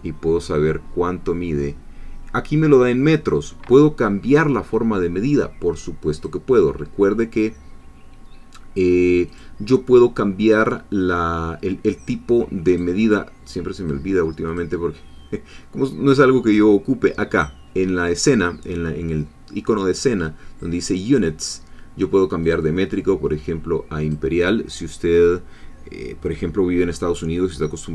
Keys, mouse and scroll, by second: 6.1 click, 9.3 click, 12.7 click, 14.5 click, 20.8-22.0 drag, 22.5 click, 24.1 click.